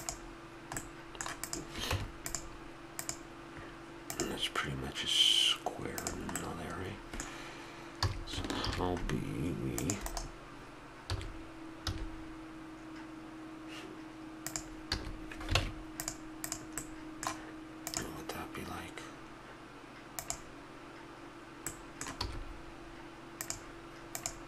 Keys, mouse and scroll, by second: 0.8 middle drag, 1.9 Tab, 6.3-7.9 middle drag, 7.9 a, 8.6 ctrl+r, 11.0 s, 14.9 a, 15.5 ctrl+Tab, 16.4 click, 16.8 middle click, 21.6-23.7 middle drag, 22.1 e.